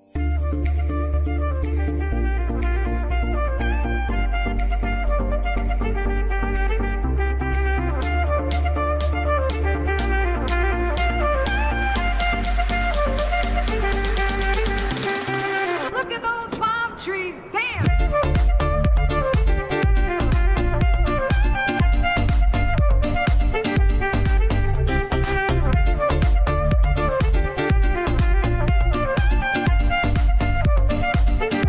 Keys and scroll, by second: 15.8 ctrl+space, 22.5 ctrl+space.